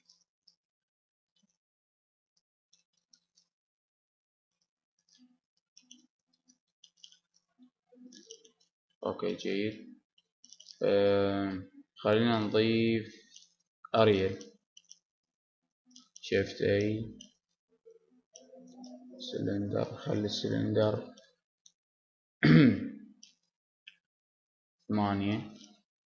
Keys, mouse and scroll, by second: 0.0 middle click, 1.3 s, 3.3 click, 5.3 click, 5.5 Tab, 5.8-7.3 middle drag, 7.5 Tab, 8.3 middle click, 9.7 middle click, 10.5-11.6 middle drag, 11.7 middle click, 12.6 middle click, 13.7-14.9 middle drag, 15.1 middle click, 15.8 shift+a, 20.3-22.1 drag, 22.1 middle click.